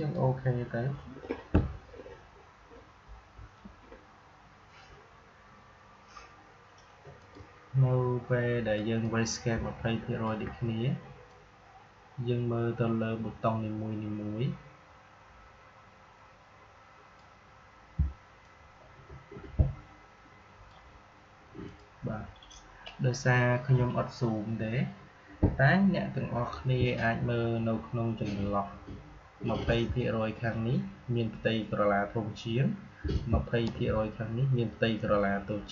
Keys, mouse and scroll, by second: 7.1-11.2 drag, 11.2-18.3 drag, 18.3-21.6 shift+drag.